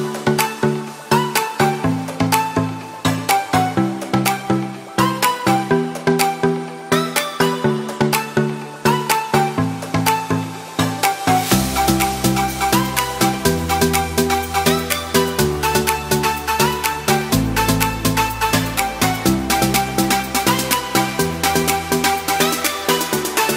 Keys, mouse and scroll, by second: 7.4 middle click, 22.4 click.